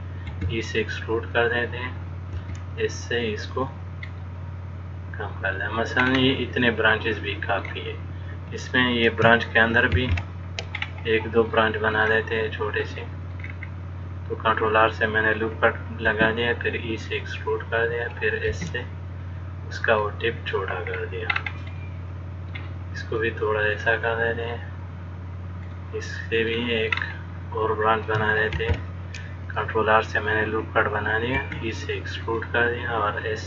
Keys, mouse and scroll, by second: 0.5 e, 2.6 s, 4.4 middle click, 6.2-6.9 scroll up 3, 6.9 middle click, 10.2 ctrl+r, 13.1 click, 13.7-14.8 scroll down 4, 14.8 click, 15.0 click, 16.3 e, 18.8 s, 21.1-21.5 scroll down 2, 21.5-23.2 scroll up 2, 22.0 middle click, 23.4 click, 25.9 middle click, 27.2-28.0 scroll up 2, 28.8 ctrl+r, 31.6 e.